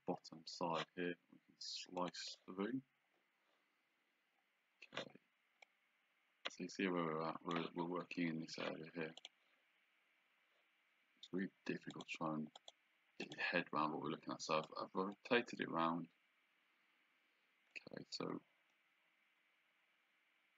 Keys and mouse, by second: 2.0 click, 5.7 click, 9.3 click, 12.0 click, 14.7 click, 18.8 click.